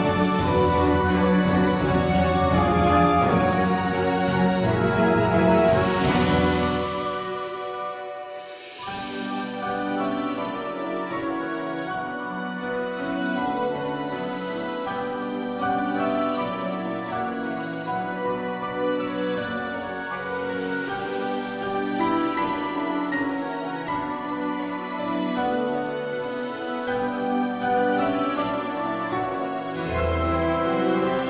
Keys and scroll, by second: 3.1 g, 9.5 g, 14.8 g, 20.4 g, 22.3 g, 24.6 g, 26.7 g, 29.0 g.